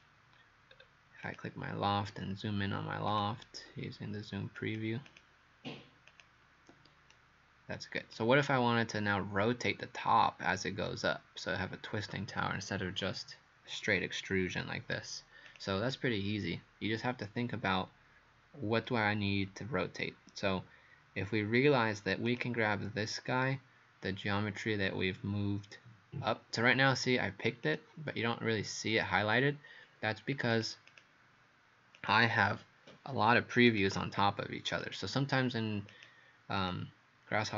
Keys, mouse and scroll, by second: 0.7-1.3 scroll up 2, 1.3 click, 5.1 click, 6.1 click, 7.1 right click, 15.5 click, 17.6 scroll down 1, 22.3 click, 30.9 click, 32.0 click, 36.6 click.